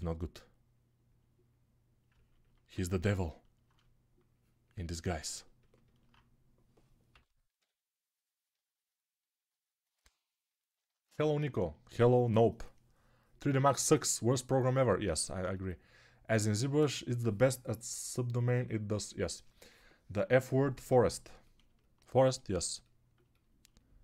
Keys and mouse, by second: 2.0-4.8 ctrl+alt+drag, 2.0-4.8 ctrl+alt+right drag, 7.0 p, 7.5 p.